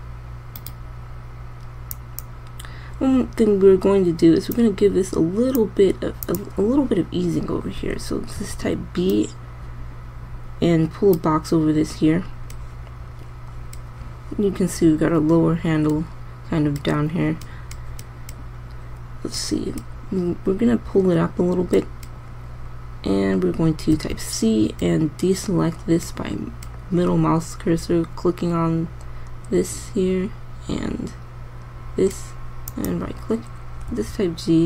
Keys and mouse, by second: 5.0-5.6 right drag, 8.9 b, 24.5 c, 34.5 g.